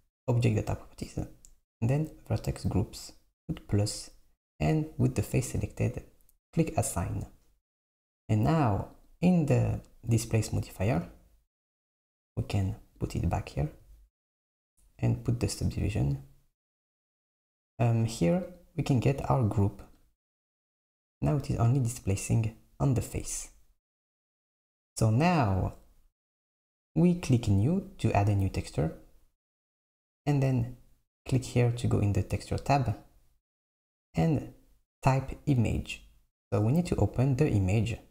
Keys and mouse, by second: 0.8 click, 3.5-6.6 drag, 6.7-9.2 drag, 10.8 Tab, 13.1 click, 16.3 click, 18.6-21.6 drag, 28.4-31.4 drag, 32.5-35.5 drag, 37.9 click.